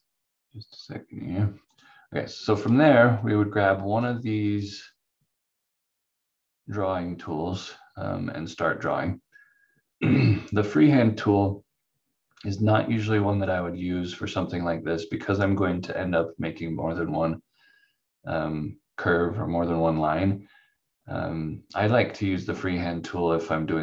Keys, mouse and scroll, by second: 15.3 click.